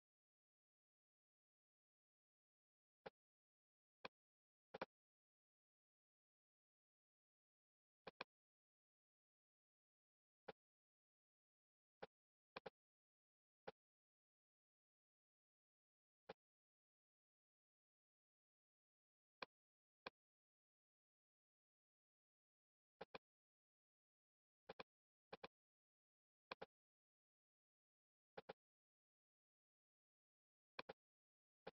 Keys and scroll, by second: 23.9 super+z.